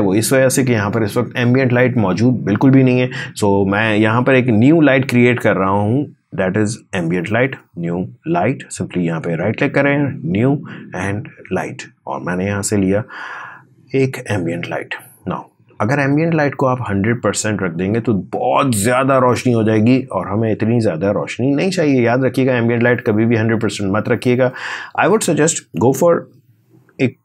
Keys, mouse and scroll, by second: 5.0 right click, 5.2 click, 8.9 right click, 10.1 click, 17.5 click, 22.8 click, 27.1 3.